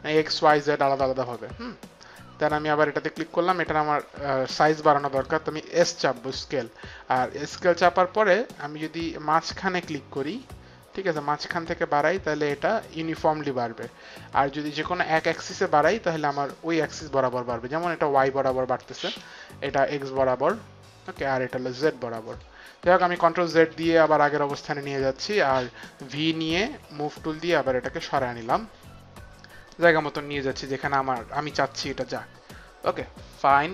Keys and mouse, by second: 1.2 click, 5.6 s, 8.6 right click, 10.9 click, 16.0 click, 19.6 click, 21.6 click, 23.0 ctrl+z, 23.5 ctrl+z, 24.0 ctrl+z, 26.1 v, 27.1 click, 29.8 click, 32.1 click.